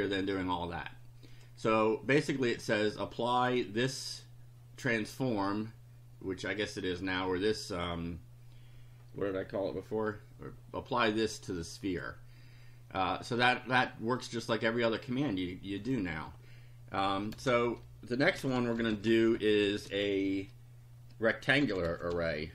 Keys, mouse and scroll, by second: 1.3 click, 2.6-4.1 drag, 11.7 click, 14.2 click, 15.8 click, 17.3 Return, 18.1-19.6 typing, 21.3-22.5 typing.